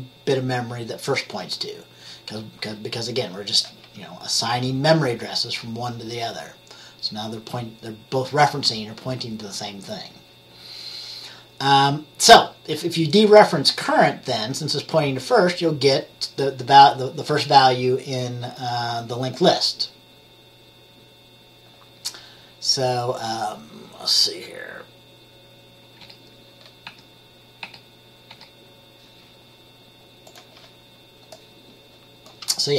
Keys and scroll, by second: 26.1 F10, 27.0 F10, 27.7 F10, 28.4 F10.